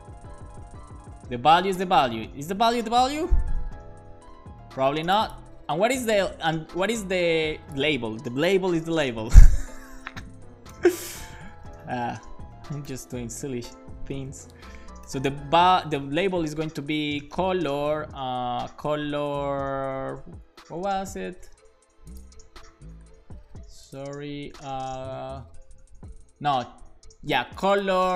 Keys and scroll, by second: 2.3 super+s, 8.4-9.6 typing, 9.7 Right, 10.2 alt+shift+Left, 11.3-12.8 typing, 13.9-16.1 typing, 14.3 Left, 17.1-18.4 typing, 21.1 super+s.